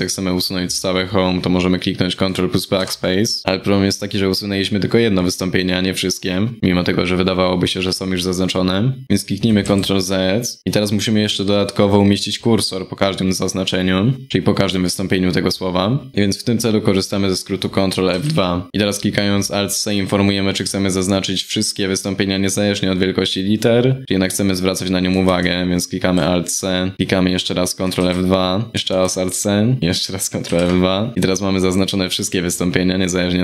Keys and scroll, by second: 17.7 ctrl+F2, 18.7 alt+c, 24.9 alt+c, 27.6 ctrl+F2, 28.7 alt+c, 30.1 ctrl+F2.